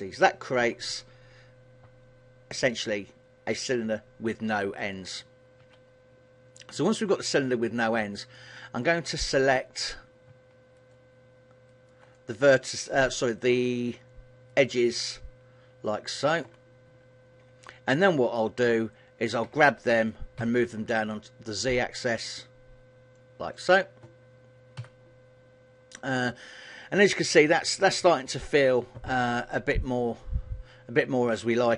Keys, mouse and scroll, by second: 1.0 middle click, 5.7 KP_1, 7.0 middle click, 17.0 KP_1, 19.5 g, 23.7 click, 24.9 a.